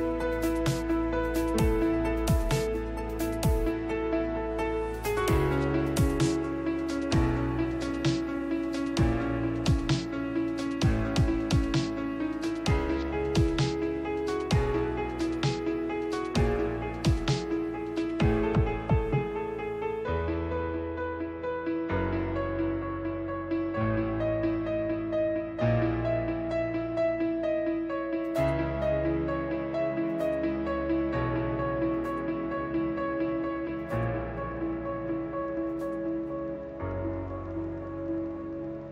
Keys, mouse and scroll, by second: 3.4 right click, 4.4 Tab, 6.1-7.8 right drag, 7.6 shift+s, 17.3 ctrl+h, 22.5 Tab, 30.2 shift+Left, 34.7 shift+s, 38.4 middle click.